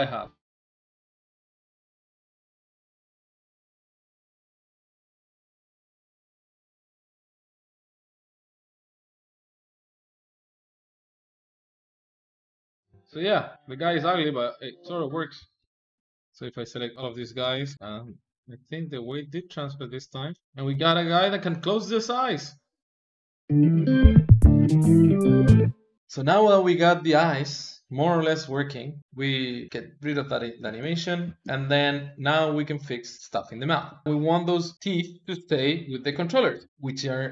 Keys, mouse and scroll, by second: 0.3 middle click, 0.4 KP_1, 0.5 ctrl+middle click, 0.7 ctrl+Tab, 0.8 ctrl+Tab, 1.4 click, 1.9 n, 2.1 click, 2.6 a, 2.7 click, 3.1 click, 3.4 ctrl+middle click, 4.2 click, 5.1 g, 5.4 click, 5.9 alt+shift+z, 5.9-7.4 ctrl+middle drag, 7.7 alt+shift+z, 7.9 ctrl+middle click, 8.1 click, 8.2 middle click, 8.3 click, 8.5 middle click, 8.7 ctrl+z, 8.9 middle click, 8.9 g, 9.2 middle click, 9.4 g, 9.8 middle click, 9.9 g, 10.3 middle click, 10.4 g, 10.7 alt+shift+z, 10.7 ctrl+middle click, 11.0 alt+shift+z, 11.2 alt+shift+z, 11.3 ctrl+middle click, 11.9 click, 12.5 middle click, 12.6 alt+shift+z, 12.7 alt+shift+z, 12.9 click, 13.5-15.4 middle drag, 15.4 ctrl+c, 15.6 middle click, 15.7 alt+shift+z, 16.1 click, 17.2 ctrl+c, 17.7 ctrl+shift+v, 17.7-19.5 middle drag, 20.4-23.4 middle drag, 25.9 alt+shift+z, 29.0-30.5 shift+middle drag, 30.5 space, 31.1 space, 31.7-34.0 drag, 34.0 middle click, 34.0 r, 34.2 click, 35.9 KP_3, 36.7 click, 37.2 g.